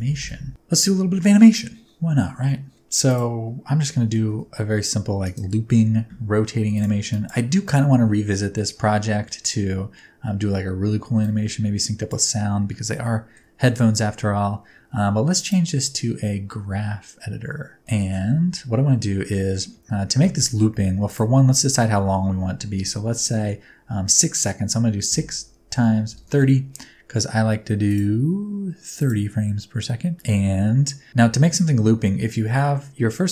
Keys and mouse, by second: 3.1 click, 4.0 r, 4.4 z, 5.3-6.8 drag, 7.1 click, 11.2 click, 13.0 shift+middle click, 15.4-17.8 drag, 17.8 middle drag, 21.0-26.7 drag, 29.0-30.1 drag.